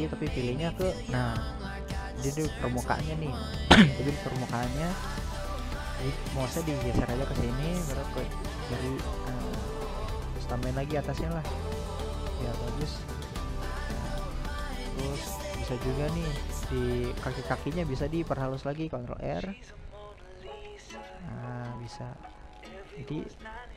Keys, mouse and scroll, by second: 6.4-7.0 middle drag, 7.0 ctrl+r, 9.5-11.5 middle drag, 11.5-11.9 scroll up 2, 11.9 middle click, 12.8-13.2 scroll up 1, 13.2-14.8 middle drag, 14.8 ctrl+r, 17.6-19.2 middle drag, 19.2 ctrl+r, 21.3-23.7 middle drag.